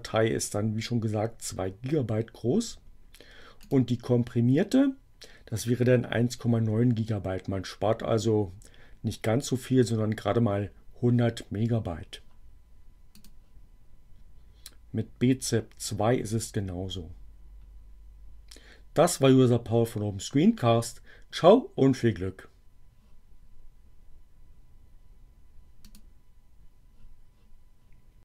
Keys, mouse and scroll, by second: 3.4 click, 13.0 click, 25.6 click.